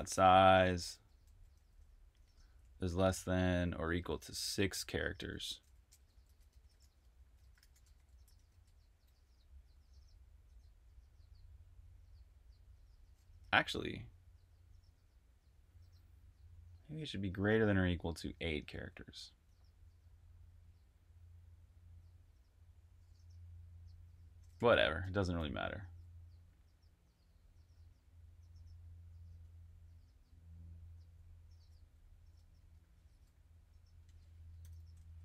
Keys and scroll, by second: 0.0-2.3 typing, 3.3-9.6 typing, 18.2-19.0 typing, 24.4-25.8 typing, 27.9 typing, 30.4-32.9 typing, 34.0-35.2 typing.